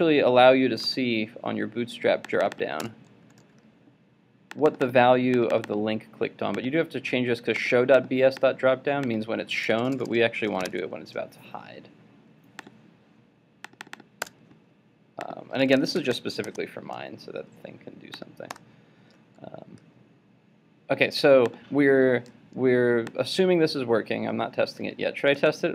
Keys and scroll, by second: 0.9 super+v, 25.4 super+s.